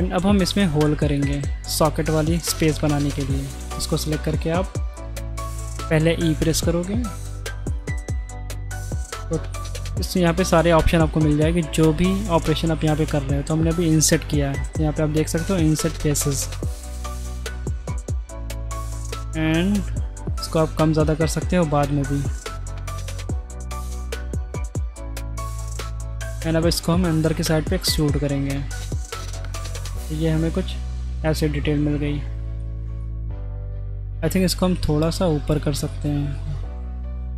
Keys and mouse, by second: 0.6 middle click, 0.9 3, 1.1 right click, 1.6 middle click, 2.7 shift+middle click, 3.7 middle click, 6.3 i, 7.9 middle click, 17.9 middle click, 20.4-23.0 shift+drag, 24.0-26.0 shift+drag, 26.2 middle click, 26.7 e, 28.2-30.1 middle drag, 30.4 Tab, 31.2-32.3 middle drag, 33.0-33.7 shift+middle drag, 33.9 alt+2, 36.0 middle click.